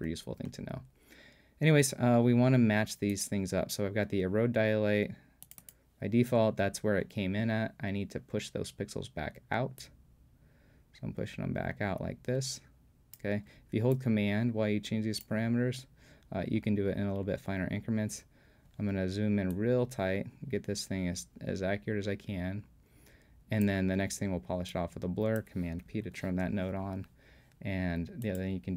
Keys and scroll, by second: 26.1 super+p.